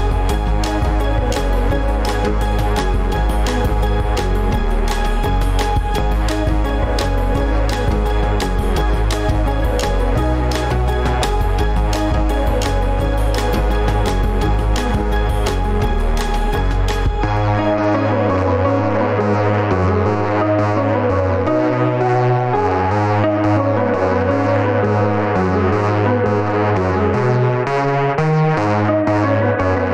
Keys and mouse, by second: 3.5 KP_Enter, 7.5-8.0 right drag, 9.3 middle click, 9.9 middle click, 10.5-11.7 middle drag, 14.0 alt+z, 14.9-15.4 shift+middle drag, 16.2 1, 19.7-21.3 drag, 24.1 click, 27.9 click.